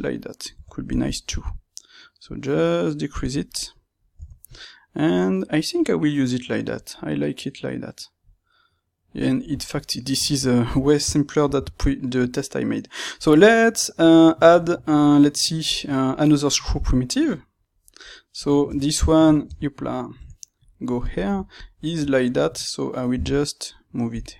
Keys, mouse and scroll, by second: 0.5 Tab, 1.1 s, 4.1 Tab, 18.6 Tab, 21.1 click, 22.1-24.3 middle drag, 23.0 g.